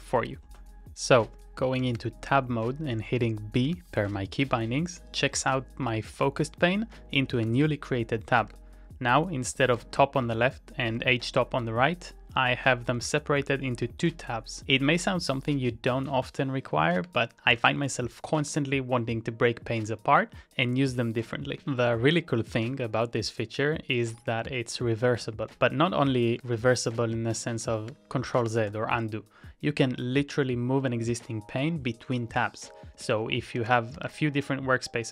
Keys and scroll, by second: 1.8 ctrl+t, 3.7 b, 6.3 h, 7.4 ctrl+t, 7.6 l, 8.4 ctrl+t, 8.8 h, 9.7 ctrl+t, 10.0 l, 11.0 ctrl+c, 12.8 ctrl+d, 17.0 ctrl+c, 17.2-18.4 typing, 21.5 ctrl+a, 21.8 n, 24.3 ctrl+t, 25.2 [, 26.3 ctrl+t, 26.7 ], 27.8 ctrl+a, 28.0 h, 28.4 ctrl+t, 28.7 ], 33.6 ctrl+t, 34.0 b.